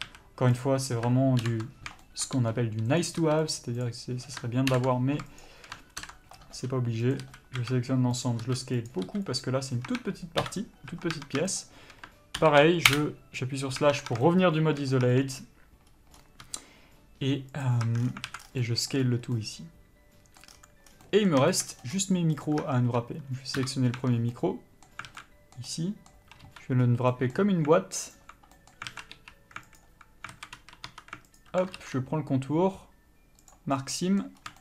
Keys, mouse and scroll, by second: 0.4 a, 0.9 click, 1.8 ctrl+l, 2.7 g, 3.3 click, 3.5 s, 4.2 click, 5.0 ctrl+l, 5.7 shift+click, 6.4 ctrl+l, 6.8 g, 7.5 click, 7.5 a, 7.9 s, 10.2 Tab, 10.7 KP_Divide, 11.2 Tab, 11.9 shift+click, 13.2 ctrl+l, 14.1 Tab, 14.6 shift+middle click, 15.4 Tab, 16.8 s, 18.2 Tab, 18.3-18.8 scroll down 2, 18.6 alt+a, 18.9 middle click, 19.5 scroll up 1, 19.7 middle click, 20.8 scroll down 1, 21.4 middle click, 21.8 shift+middle click, 22.0 scroll up 1, 22.8 click, 22.9 Tab, 23.9 KP_Divide, 24.3 Tab, 24.6 middle click, 25.4 alt+a, 26.0 middle click, 26.8 3, 27.0-27.4 scroll up 1, 27.4 middle click, 28.4 alt+click, 28.9 middle click, 29.2 alt+a, 30.1 alt+click, 30.6 alt+a, 31.2 2, 31.7 alt+click, 33.8 ctrl+e, 34.1 scroll down 1, 34.2 middle click.